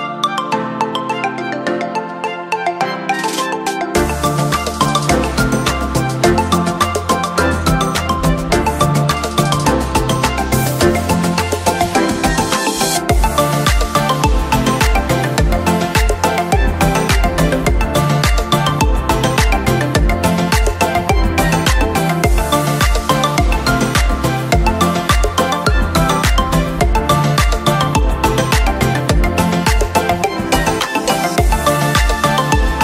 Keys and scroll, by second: 11.1 ctrl+shift+j.